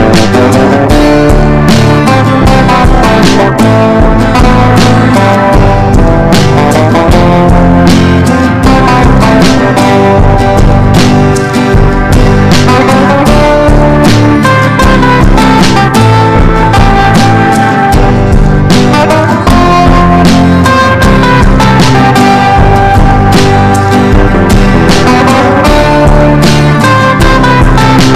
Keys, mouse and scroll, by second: 2.2 click, 3.1 ctrl+shift+g, 4.1 click, 4.9 ctrl+shift+g, 5.6 click, 6.1 ctrl+shift+g, 6.8 click, 7.3 ctrl+shift+g, 8.0 click, 8.5 ctrl+shift+g, 9.5-12.9 drag, 14.5 F4, 15.2 click, 18.3 F4, 18.9 click, 21.2 F4, 22.0 click, 24.3 F4, 24.8-27.1 drag, 27.1 F4, 27.7 click.